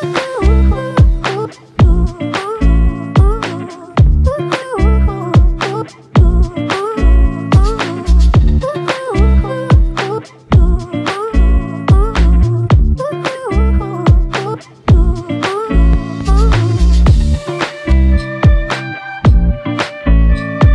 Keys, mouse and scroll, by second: 0.8 r, 14.0 f, 15.9 shift+click, 19.4 alt+shift+click, 20.0 alt+shift+click.